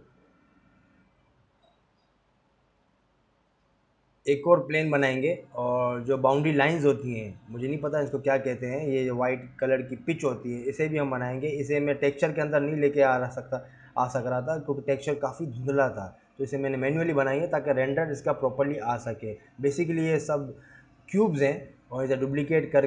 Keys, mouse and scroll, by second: 0.0 shift+a, 2.4-3.2 scroll down 6, 2.6 g, 3.3 s, 4.9 click, 5.2-5.5 scroll up 4, 5.5 g, 6.3 s, 8.3-8.6 scroll up 3, 8.6 s, 9.4 g, 10.3 s, 11.2 shift+scroll up 1, 12.4 shift+d, 14.5 shift+d, 15.5 r, 17.3 g, 17.4 s, 19.0 shift+d, 21.3 Escape, 21.9 ctrl+z, 22.1 ctrl+z.